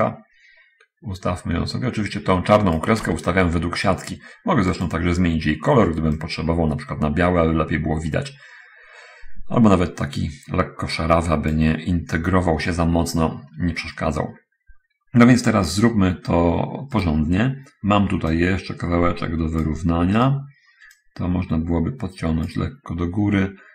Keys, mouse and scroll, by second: 0.4-3.3 ctrl+drag, 5.1 click, 6.5-11.7 drag, 17.3 right click, 18.7-20.2 drag, 21.3-23.0 drag.